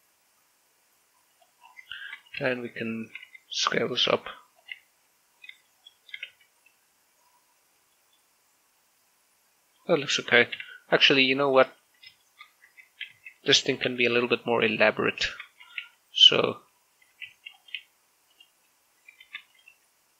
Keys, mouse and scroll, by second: 2.1 click, 2.4 scroll down 1, 3.0 right click, 3.2 Tab, 3.8 a, 4.0 a, 4.6 s, 4.9 x, 5.4 click, 5.6 Tab, 6.1 scroll up 1, 6.5 shift+middle click, 7.1 shift+z, 8.0 scroll down 1, 8.8 shift+middle click, 9.6-11.7 middle drag, 11.7 scroll up 1, 12.0 shift+middle click, 12.6 z, 13.0 shift+middle click, 13.3 scroll up 1, 13.5 Tab, 13.9 a, 14.6 l, 16.1 shift+d, 16.4 click, 16.6 r, 17.1 click, 17.8 s, 18.0 x, 18.4 click, 18.6 g, 19.1 click, 20.0 shift+d.